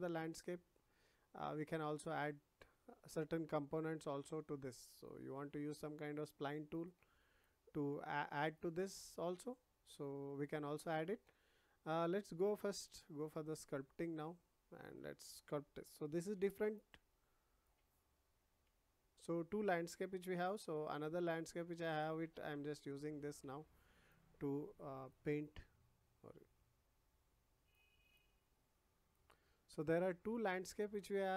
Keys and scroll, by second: 16.3 ], 18.6 ctrl+z, 20.3 ].